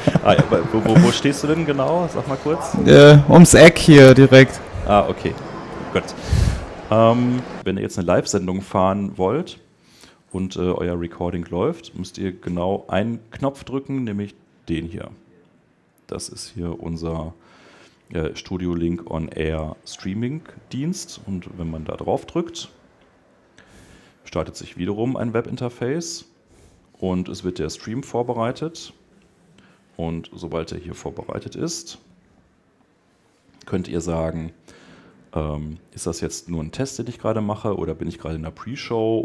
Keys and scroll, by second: 7.4 super+Tab.